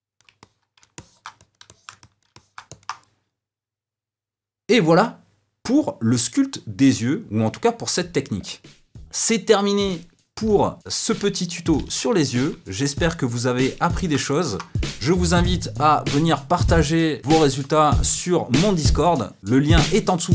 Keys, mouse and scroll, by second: 0.4-18.6 middle drag, 19.0 middle click, 19.2-20.3 middle drag.